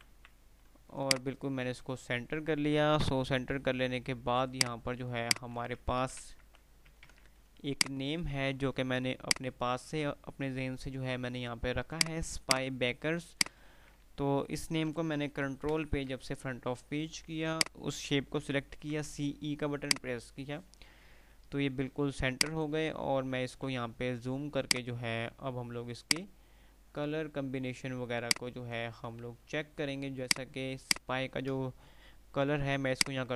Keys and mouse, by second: 0.1 c, 1.0 click, 1.5 typing, 2.0 F3, 4.7 click, 6.1 ctrl+g, 6.5 Delete, 7.0 ctrl+z, 7.7 F2, 8.0 F2, 8.0 click, 9.4 click, 9.8 F2, 12.1 click, 14.4 F3, 15.5 shift+Page_Up, 17.7 shift+click, 18.6-19.5 typing, 20.0 click, 20.3 F3, 21.4 F2, 21.5 typing, 22.5 click, 22.8 typing, 23.0 F2, 23.5 F3, 23.7 F2, 24.8 click, 25.1 F2, 26.0 click, 27.3 F2, 27.8 F2, 28.7 click, 29.0-29.4 F2, 30.0 typing, 30.5 click, 31.0 ctrl+click, 32.8 click.